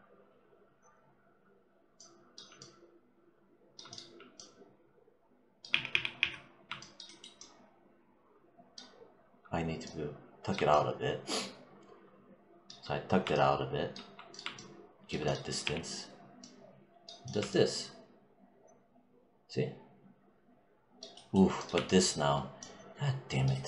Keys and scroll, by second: 5.5 z, 15.5 e.